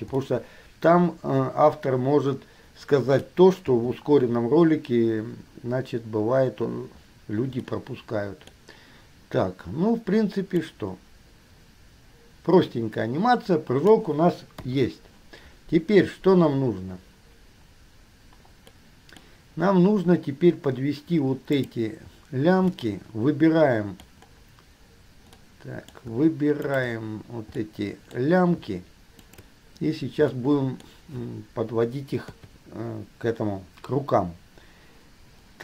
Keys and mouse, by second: 0.5-3.9 middle drag, 3.9 KP_3, 8.0-9.0 middle drag, 10.9-14.1 middle drag, 14.8 KP_3, 18.9-19.4 middle drag, 21.8 click, 23.0-24.4 middle drag, 26.3 shift+middle click, 26.8 shift+click, 27.0-27.8 middle drag, 28.4-29.4 shift+middle drag, 29.4 shift+click, 29.5-30.4 shift+middle drag, 30.5-32.5 drag, 32.5 KP_3.